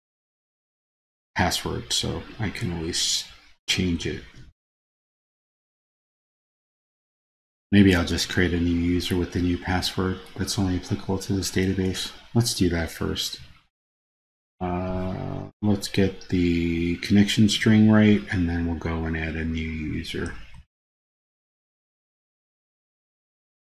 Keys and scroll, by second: 4.3 super+c, 14.0 super+c, 15.8 super+c, 20.9 super+v.